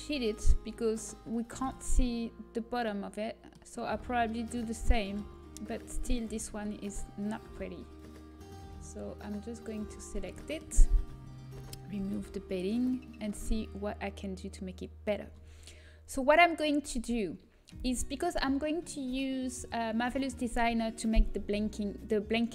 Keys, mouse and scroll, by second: 6.2 right click, 6.5 Tab, 8.4-11.6 drag, 11.6 ctrl+i, 12.6 h.